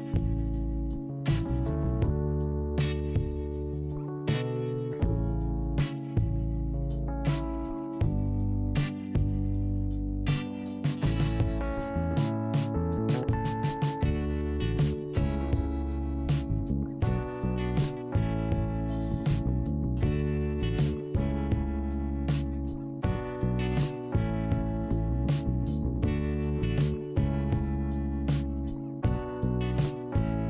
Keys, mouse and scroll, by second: 0.4 click, 0.4 click, 3.1-3.5 scroll down 2, 4.3 click, 4.5 scroll down 1, 4.7 click, 6.3-7.3 scroll down 1, 7.3 click, 10.6 click, 10.7 click, 12.6 click, 12.7 click, 13.1 click, 13.3 click, 14.3 click, 17.1 scroll up 1, 17.5 click, 17.5 click, 18.8 click, 18.8 click, 20.6 click, 20.7 click, 21.5 click, 22.6 scroll down 1, 23.7 click, 26.7-29.2 scroll down 2, 29.2 click, 29.4 click, 30.1-30.4 scroll down 1.